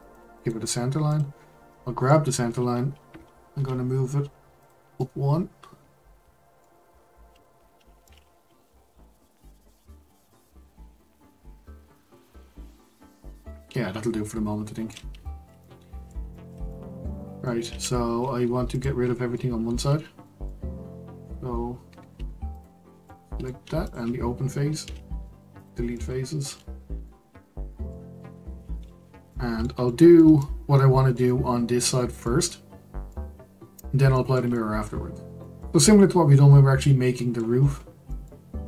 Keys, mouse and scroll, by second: 1.1 click, 1.7 middle click, 2.3-3.5 scroll up 1, 3.5 g, 5.0-6.9 middle drag, 6.9-8.0 scroll down 1, 8.0-11.0 middle drag, 15.2-18.7 shift+middle drag, 18.7 click, 19.1-22.5 middle drag, 22.5 alt+click, 22.9 scroll down 1, 23.1-23.8 middle drag, 23.8 shift+click, 24.8 x, 25.9-26.4 middle drag, 26.4 Tab, 27.0-28.8 middle drag, 28.8-29.3 scroll up 1, 29.3-35.8 middle drag, 35.8-36.2 scroll down 2, 36.2-37.1 scroll up 1, 37.1-38.1 scroll up 4, 37.2 middle click, 38.1-38.6 shift+middle drag.